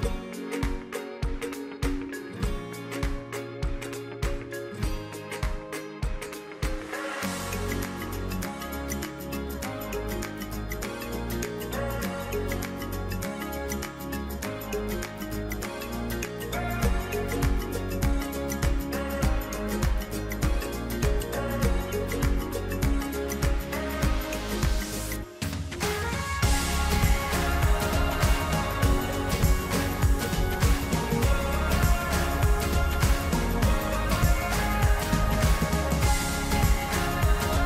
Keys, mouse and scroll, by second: 1.5 middle click, 2.0 scroll up 1, 2.1-3.1 scroll down 2, 3.1-7.2 middle drag, 7.2-8.1 scroll up 1, 8.1-10.0 middle drag, 10.0-10.8 scroll down 2, 10.8-13.8 middle drag, 14.6 2, 15.6 click, 16.2-18.2 middle drag, 18.7 alt+click, 19.9-22.6 middle drag, 22.6 click, 24.6-29.8 middle drag, 30.4-30.8 scroll down 2, 30.8-32.5 middle drag, 32.5 click, 32.9 middle click, 33.5 click, 33.9-37.6 middle drag.